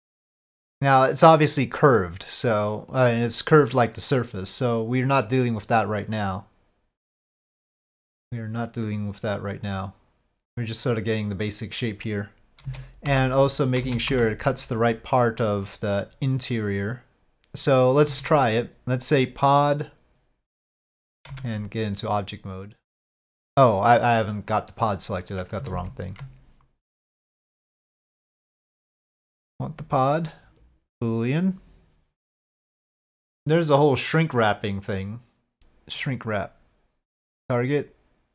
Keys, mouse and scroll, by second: 3.4-3.7 middle drag, 5.2-7.5 drag, 7.8-12.1 middle drag, 12.6 z, 13.8 z, 14.6-15.5 middle drag, 16.1-17.6 middle drag, 18.1 Tab, 21.3 Tab, 22.2 middle click, 25.7 ctrl+z, 27.5-28.8 drag, 30.1-31.5 drag, 32.0 middle click, 34.9 middle click, 35.1 right click, 35.3-36.2 drag, 35.5 right click, 37.4-38.3 drag.